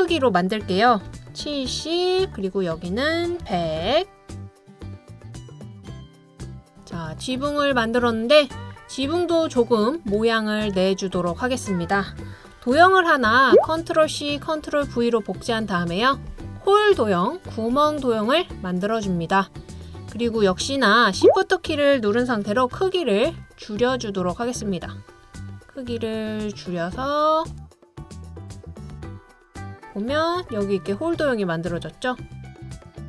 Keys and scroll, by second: 1.1-1.5 typing, 3.2-4.7 typing, 14.1 super+c, 14.7 super+v, 32.7 Down, 33.0 Down, 33.0 Down.